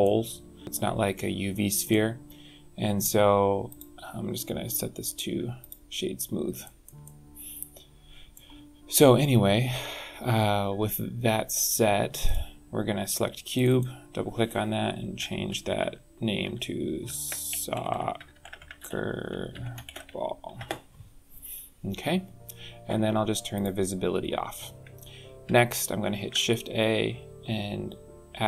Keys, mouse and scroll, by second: 0.6 middle click, 3.7 click, 6.2 scroll down 3, 6.6 shift+middle click, 7.0 middle click, 12.2 click, 13.6 click, 13.7 click, 17.2 BackSpace, 17.9 d, 18.3 BackSpace, 18.6 c, 20.3 l, 23.5 click, 26.1 shift+a.